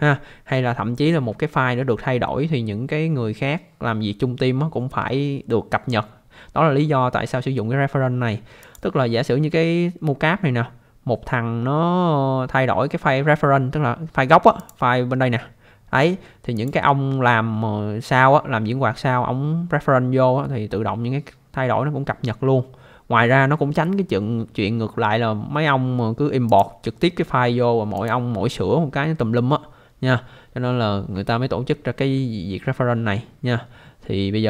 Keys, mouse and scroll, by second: 8.6 click, 10.2 scroll up 1, 10.7 scroll down 1, 14.6 click, 16.5 click, 26.5 click, 28.0 click.